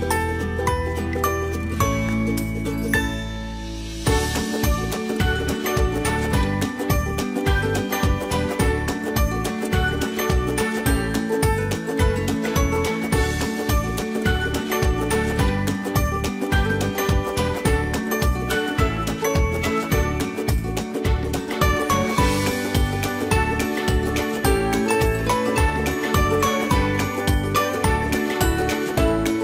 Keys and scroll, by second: 3.3 ctrl+j.